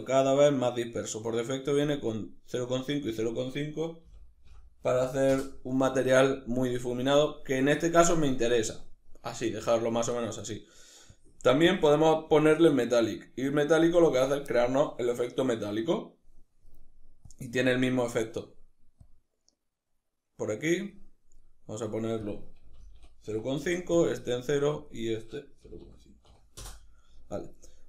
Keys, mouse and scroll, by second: 5.0 Return, 23.3 Return, 26.3 Return.